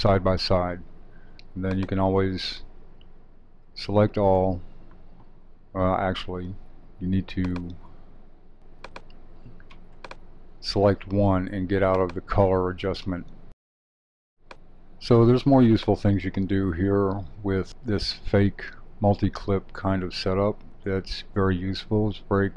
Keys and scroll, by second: 3.6 super+a.